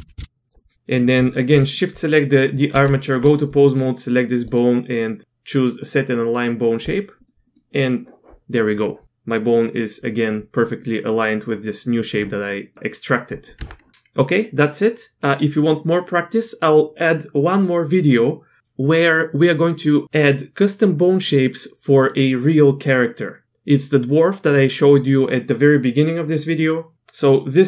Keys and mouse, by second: 0.5 click, 1.9 shift+click, 2.8 Tab, 3.5 click, 7.2 click, 7.4 click, 10.8 click, 12.6 click, 13.5 Tab, 14.1 click.